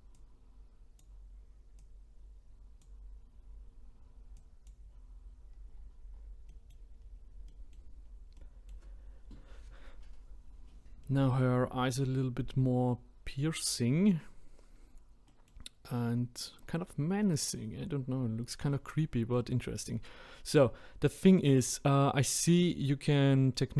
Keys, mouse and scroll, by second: 5.6-6.0 scroll down 1, 6.2 scroll down 9, 6.5 middle click, 6.9-7.5 scroll up 3, 7.5-8.0 middle drag, 8.0-8.4 scroll down 3, 8.4-10.4 middle drag, 10.4-11.0 scroll up 2, 11.0-11.5 middle drag, 11.6-12.1 scroll up 2, 13.7-15.2 scroll up 2, 15.2-16.0 middle drag, 16.0-17.2 scroll down 6, 17.2-17.7 middle drag, 17.7-18.2 scroll up 2, 18.2-18.7 scroll down 1, 18.7-21.5 middle drag, 21.5-22.4 scroll up 2, 22.4-22.9 middle drag, 22.9-23.4 scroll down 2, 23.4 middle click.